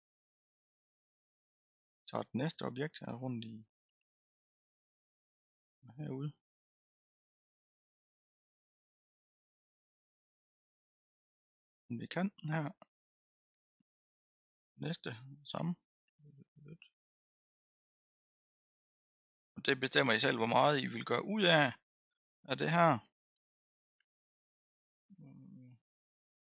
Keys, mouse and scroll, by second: 0.7-1.5 scroll down 3, 1.5-3.2 scroll up 1, 3.2-7.7 drag, 7.7-9.0 middle drag, 9.0-14.0 drag, 14.0-15.2 scroll down 1, 15.2-15.6 scroll down 1, 15.8-21.8 drag, 22.0 scroll down 3, 22.6-23.1 scroll down 2, 23.6-25.5 middle drag, 25.5-26.0 scroll up 1, 26.0-26.5 scroll down 1.